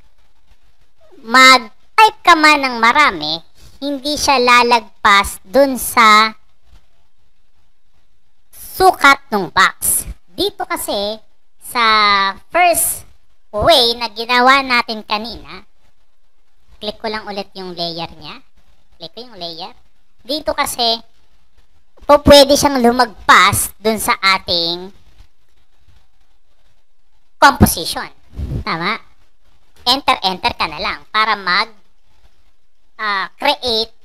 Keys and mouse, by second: 0.3-9.0 typing, 11.6 click, 12.3 click, 12.5 click, 13.1-14.5 drag, 18.4 click, 19.8 click, 20.3-25.7 typing, 29.6 Return, 29.7-34.0 typing.